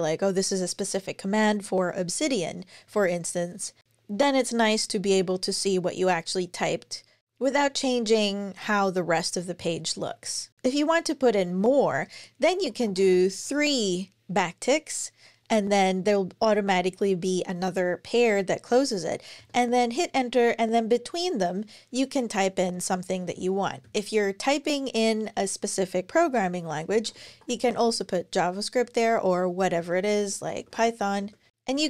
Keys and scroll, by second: 11.9 Return, 12.5 `, 16.4 Page_Down, 18.5 Page_Up, 19.2 Return, 23.2 Up, 23.6 super+Right, 26.5-28.0 typing, 29.6 alt+shift+Left, 29.6-31.8 typing.